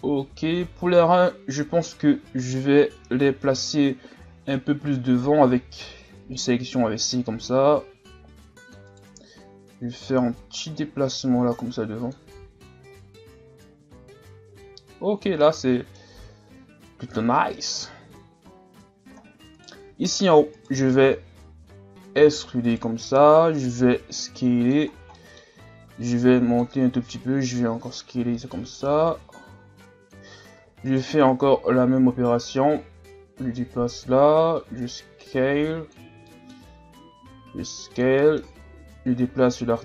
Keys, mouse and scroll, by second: 0.0 Tab, 0.7 scroll down 1, 1.0-1.8 scroll up 3, 1.9 scroll up 2, 2.1 z, 3.6 right click, 5.5 c, 9.7-12.3 drag, 12.3 z, 12.9 Tab, 14.6 a, 15.1-15.4 scroll down 5, 15.4-16.3 middle drag, 16.3-17.7 scroll up 3, 17.7 KP_1, 18.4-19.5 scroll up 10, 19.5 right click, 19.8 Tab, 20.6 alt+right click, 21.0-21.8 scroll down 1, 21.8 scroll up 2, 22.2 e, 23.3-23.9 scroll up 1, 23.9 s, 24.9 scroll down 1, 25.2 middle click, 26.0-30.2 drag, 30.6 e, 31.4-36.3 drag, 36.3-36.8 middle drag, 36.8-37.3 scroll up 1, 37.3 s, 38.2 middle click, 39.1-39.8 drag.